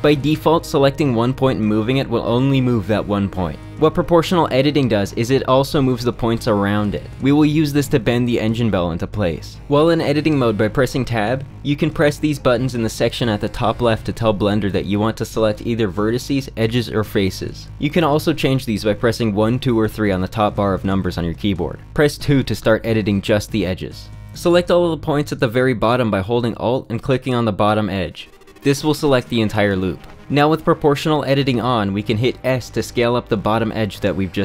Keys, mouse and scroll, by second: 3.5 click, 4.8 g, 12.8 click, 13.2 click, 15.9 click, 16.4 click, 17.6-18.7 drag, 18.7-22.0 typing, 26.2 2, 27.6 alt+click, 32.4 s.